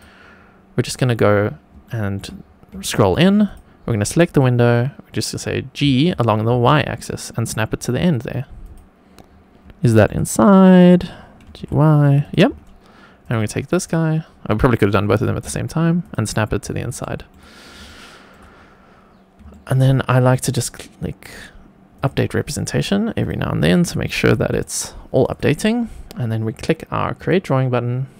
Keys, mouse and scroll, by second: 0.8 click, 1.3-1.8 scroll up 3, 1.8-2.1 shift+middle drag, 2.3 scroll up 2, 2.8-3.1 shift+middle drag, 3.4 click, 5.8 g, 6.4 y, 8.6 click, 9.2-9.6 scroll up 3, 9.7 shift+middle drag, 10.2-11.3 scroll up 2, 11.3 g, 11.5 y, 12.1 drag, 12.4-13.1 scroll down 1, 13.1 click, 13.1 scroll down 1, 13.7 click, 15.1 g, 15.2 y, 15.9 click, 16.2-16.8 scroll down 4, 16.9 shift+middle click, 17.5 scroll down 1, 17.8-18.2 shift+middle drag, 19.4-20.1 shift+middle drag, 21.9 click, 23.1 click, 24.4 click, 25.2 click, 27.1 click.